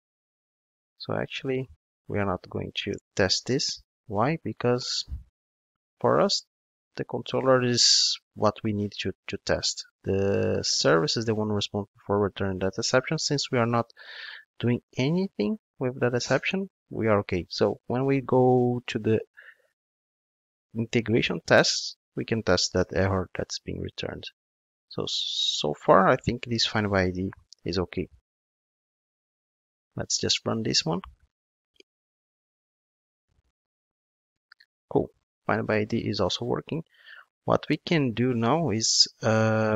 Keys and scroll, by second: 22.9 ctrl+Tab, 28.5 ctrl+shift+d.